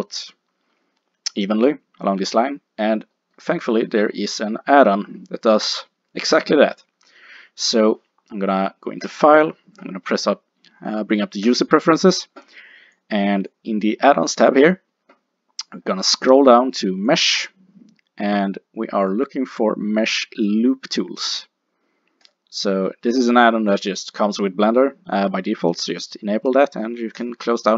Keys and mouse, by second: 9.1 click, 11.0-14.2 middle drag.